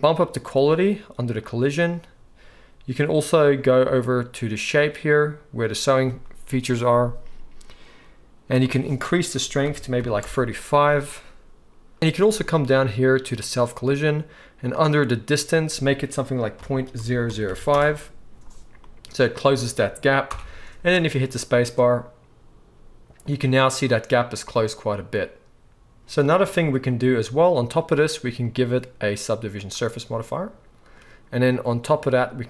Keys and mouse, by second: 1.4-12.0 drag, 12.0-15.4 middle drag, 15.4-27.8 drag, 17.3 0, 20.3 shift+Left, 20.8 space, 26.0 space, 27.8-28.5 middle drag, 28.5-32.4 drag.